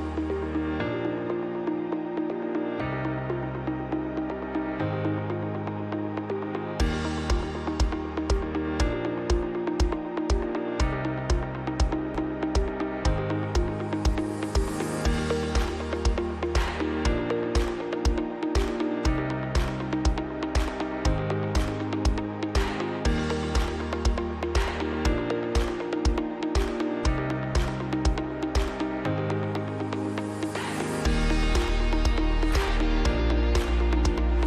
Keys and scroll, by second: 0.9 F2, 5.1 F3, 6.6 ctrl+g, 7.6 F2, 11.0 space, 11.3 Escape, 14.0 Escape, 14.8 space, 17.0 Escape, 23.7 space, 28.0 space, 28.6 Escape, 31.4 Escape.